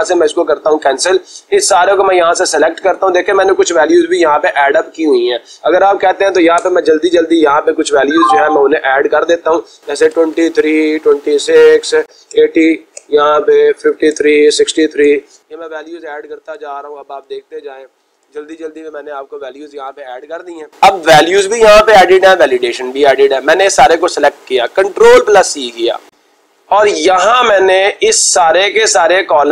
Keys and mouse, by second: 2.8 click, 5.7 click, 6.3-7.1 typing, 8.7-10.3 typing, 11.7 Return, 12.1-13.1 typing, 13.1 Return, 15.5 Return, 16.1-18.6 typing, 17.8 Return, 18.8-19.6 Return, 20.7-22.0 drag, 23.4-24.5 drag, 25.1 ctrl+c.